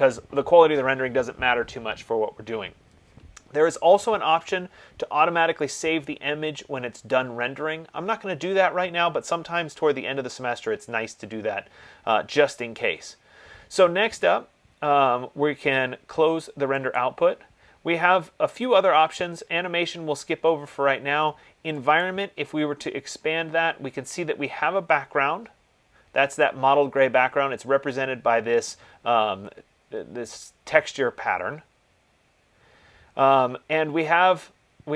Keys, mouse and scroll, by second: 17.3-27.2 drag.